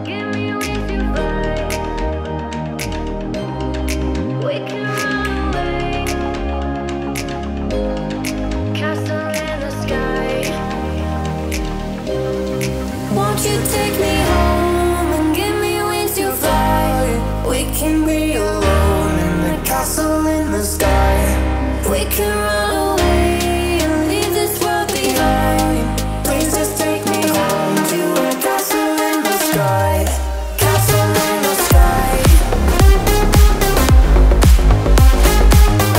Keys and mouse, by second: 0.7-1.5 right drag, 1.5-15.0 drag, 15.0-16.3 right drag, 17.2 Tab, 17.5 a, 17.7 Tab, 18.5 Tab, 19.2 Tab, 19.2 a, 21.8 Tab, 21.9 a, 23.3 a, 23.9 Tab, 24.0 a, 25.4 a, 27.8 Tab, 28.0 a, 31.2 a, 32.8 Tab, 32.9 a, 33.5 a, 34.4 a, 35.3 a.